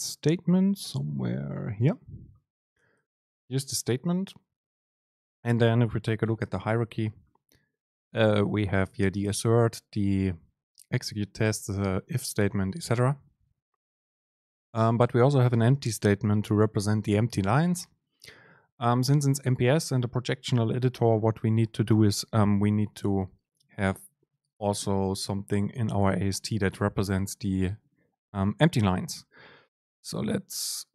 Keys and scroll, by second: 6.5 ctrl+h.